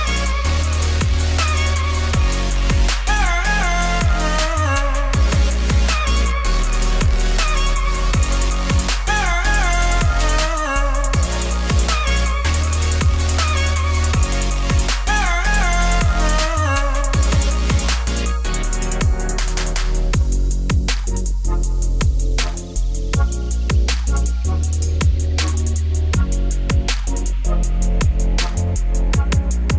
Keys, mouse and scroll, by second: 0.0 3, 0.4 alt+click, 1.0 alt+e, 2.9 click, 3.1 ctrl+z, 4.3 KP_1, 4.4 KP_3, 4.7 shift+middle click, 4.9 scroll up 1, 5.0 g, 5.6 middle click, 6.1 i, 9.1 Tab, 9.2 scroll down 2, 9.4-10.7 middle drag, 11.2 Tab, 11.6 click, 11.9 shift+s, 12.0 Tab, 14.3 middle click, 14.9 e, 16.2 e, 17.3 middle click, 17.7 e, 19.8 ctrl+b, 21.9 Tab, 22.5 q, 24.0-26.9 shift+drag, 28.5 right click, 28.9 middle click, 29.2 Tab, 29.5 click.